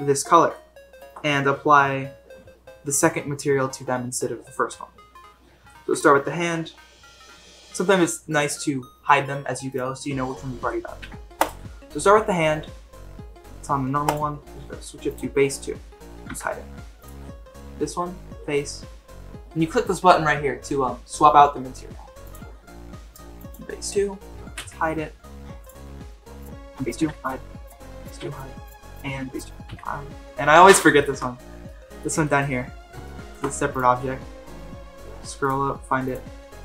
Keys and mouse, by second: 0.5-1.0 shift+middle drag, 9.7 click, 10.9 h, 14.0 click, 16.3 h, 22.2 click, 24.6 h, 25.6 click, 27.1 h, 27.2 click, 28.2 h, 28.7 click, 29.7 h, 31.0 shift+middle drag, 31.6-32.0 middle drag, 32.2 middle drag, 33.0 shift+middle drag, 35.4 click.